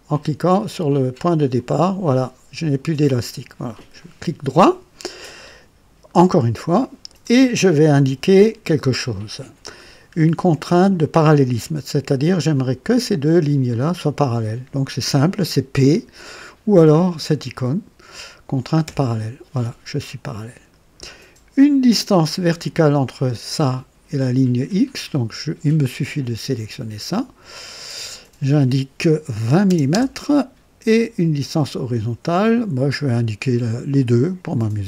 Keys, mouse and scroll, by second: 1.5 click, 4.0 right click, 6.0 right click, 9.8 scroll up 1, 10.3 right click, 12.6 click, 13.8 click, 18.8 p, 22.4 click, 27.5 click, 29.5 KP_2, 29.6 KP_0, 29.9 KP_Enter, 31.8 click, 33.9 click.